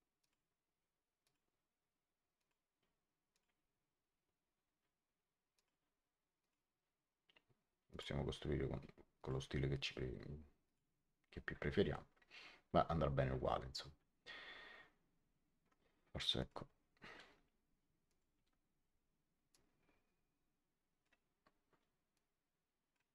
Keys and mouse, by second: 0.1 click, 1.1 click, 2.3 click, 5.5 click, 7.8 click, 9.1 click, 10.6 click, 16.0 Escape, 16.3 click, 17.1 Delete, 18.0 click, 18.3 Delete, 19.4 click, 22.0 click.